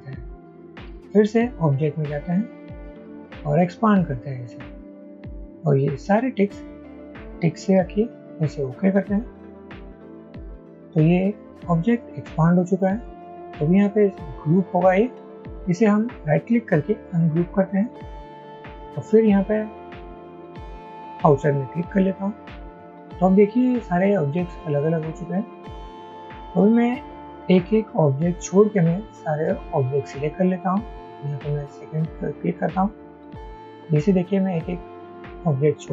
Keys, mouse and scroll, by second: 14.8 right click, 31.8 shift+click, 32.9 shift+click, 34.2 shift+click, 35.2 shift+click.